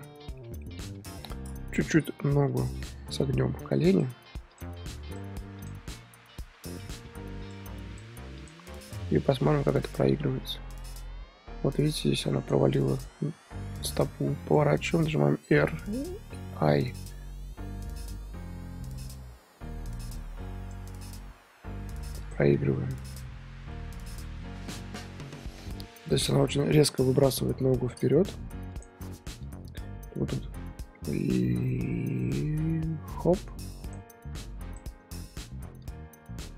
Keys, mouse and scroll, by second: 0.3 scroll down 1, 0.3-0.7 middle drag, 0.7 click, 1.0 KP_3, 1.9 r, 3.2-3.5 drag, 3.5 r, 4.6 drag, 4.7 r, 5.7 click, 5.8 r, 8.0 shift+click, 8.5 shift+click, 10.0-13.0 drag, 13.3 r, 15.9 i, 17.0-22.6 drag, 22.6-23.3 scroll down 4, 23.3-25.5 middle drag, 25.5-27.2 scroll up 1, 27.2 KP_3, 28.7-34.7 drag, 35.8-36.5 drag.